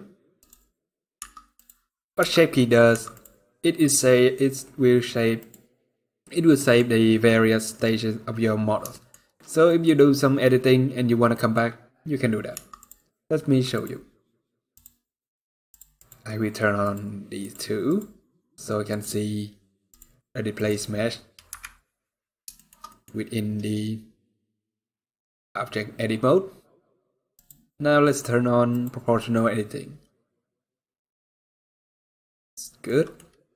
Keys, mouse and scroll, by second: 0.9 Tab, 0.9 click, 2.0 1, 2.6 Tab, 5.1 click, 6.3 middle click, 8.6 shift+middle click, 9.4 middle click, 11.0 middle click, 11.2 shift+middle click, 11.3 scroll down 1, 11.8-12.2 scroll up 1, 12.2 Tab, 13.4 click, 14.4-17.6 click, 18.7 click, 19.1 scroll up 2, 19.6 click, 21.2 KP_Decimal, 22.3 shift+middle click, 22.6 middle click, 22.8 scroll up 2, 27.1 click, 28.4 click, 32.6 middle click.